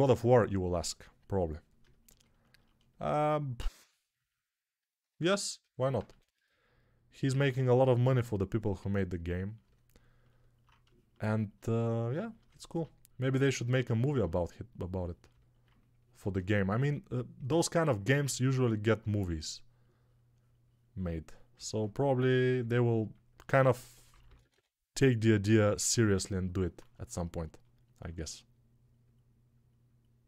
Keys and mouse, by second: 4.9-6.9 alt+shift+drag, 5.9 1, 12.4-16.6 ctrl+alt+drag, 12.4-16.6 ctrl+alt+middle drag, 12.4-16.6 ctrl+alt+right drag, 23.5-24.4 typing.